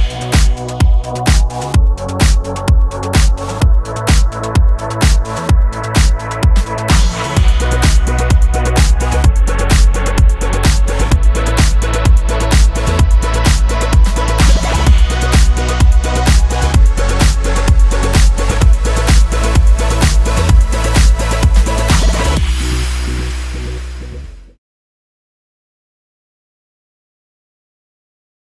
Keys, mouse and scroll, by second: 0.7 click, 1.0 click, 1.4 shift+click, 1.7 shift+click, 2.5 middle click, 3.1 shift+click, 3.4 middle click, 4.9 click, 5.3 click, 6.8 click, 7.6 click, 7.8 middle click, 8.0 shift+click, 8.1 shift+click, 8.7 shift+click, 8.9 middle click, 9.0 scroll up 2, 9.0 middle click, 9.2 shift+click, 9.3 middle click, 9.4 shift+middle click, 9.6 shift+click, 9.7 middle click, 9.8 scroll down 2, 9.8 middle click, 10.0 shift+middle click, 10.1 scroll up 2, 10.3 shift+click, 10.6 shift+click, 10.6 middle click, 10.8 shift+middle click, 10.9 shift+click, 11.0 middle click, 11.1 shift+middle click, 11.4 shift+click, 11.6 shift+click, 11.7 middle click, 11.9 click, 12.1 click, 12.5 Tab, 12.7 middle click, 12.9-13.5 scroll down 4, 13.7 KP_0, 14.5 g, 18.6 shift+d, 21.8 middle click, 22.8-23.2 scroll up 2, 23.3 shift+middle click, 23.6 shift+middle click, 24.4 KP_0.